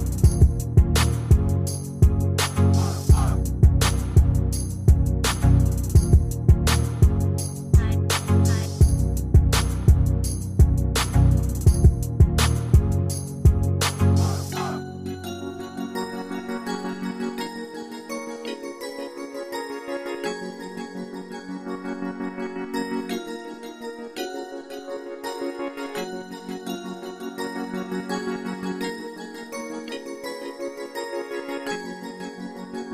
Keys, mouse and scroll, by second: 3.8-4.6 typing, 29.6 Escape.